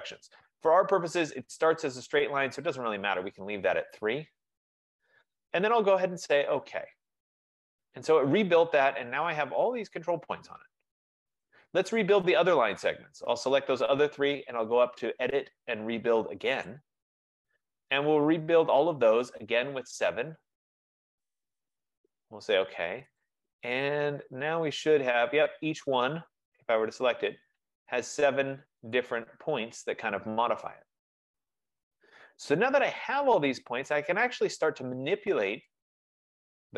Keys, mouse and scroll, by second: 7.3-12.2 drag, 7.4 F15, 13.1 click, 15.1 click, 16.9 click, 21.1 click, 22.8 click, 23.3 click, 24.5 click, 26.8 click, 29.1 click, 33.3 click.